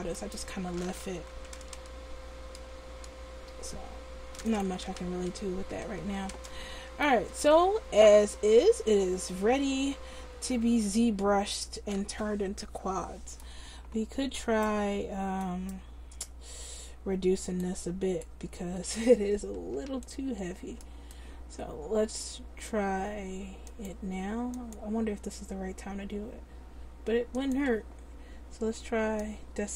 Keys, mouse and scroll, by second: 1.7 g, 4.8 click, 5.2 ctrl+z, 5.8 Tab, 14.7-17.2 right drag, 23.7-27.6 drag, 29.3-29.7 drag.